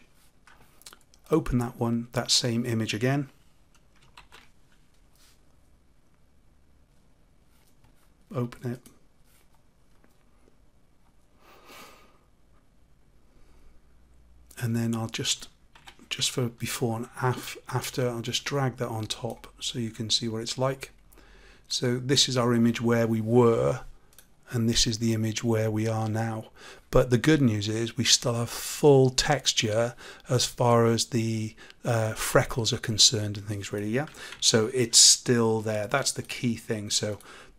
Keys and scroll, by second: 4.1 ctrl+r, 34.3 ctrl+z.